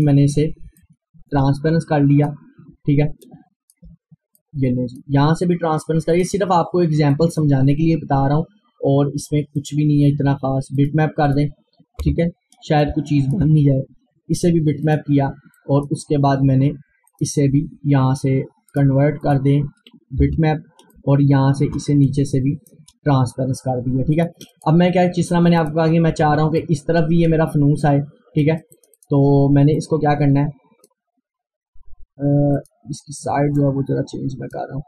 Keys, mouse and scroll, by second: 3.3 click, 4.4-6.2 drag, 6.7 scroll up 1, 7.1 click, 9.6 click, 12.0 Return, 12.9-14.9 drag, 20.3 Return, 21.0-24.2 drag, 24.8 scroll down 1, 25.6 click, 26.2 scroll up 1, 26.6 click, 27.9 scroll up 1, 28.4-34.8 drag.